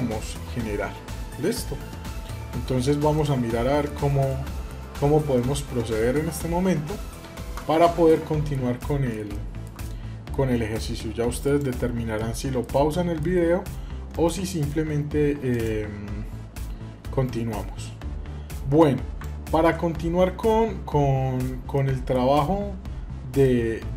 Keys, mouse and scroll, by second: 2.8 scroll down 1, 2.9 middle click, 4.1 middle click, 4.6-5.1 scroll up 1, 5.1 middle click, 5.8-6.3 scroll down 1, 7.9 shift+middle click, 8.6 middle click, 9.6 middle click, 11.2 click, 12.0 middle click, 12.6 shift+scroll down 1, 13.9-15.4 drag, 19.3 ctrl+z, 21.5 middle click, 23.2 click.